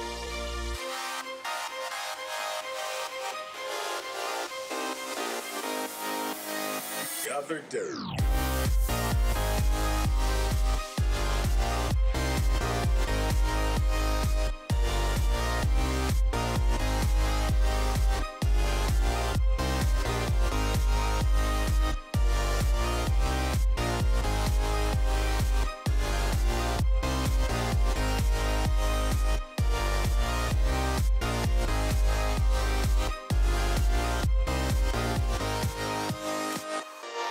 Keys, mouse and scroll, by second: 0.8 middle click, 2.0 middle click, 14.7-37.2 drag.